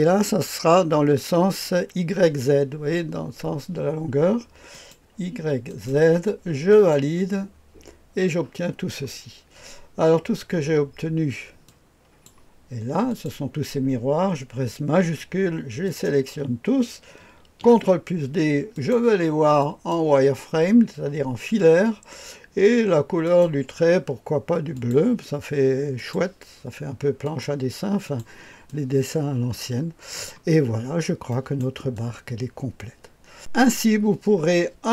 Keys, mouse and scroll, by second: 4.6 click, 5.6 click, 6.6 click, 11.6-12.8 drag, 13.0 click, 15.8 shift+click, 17.6 ctrl+d, 18.7 click, 19.5 click, 23.2 click, 24.6 click, 25.9 click, 27.1 click, 28.0 click, 30.3 click, 30.8-31.6 scroll up 1, 31.6 right click, 31.9-33.6 drag.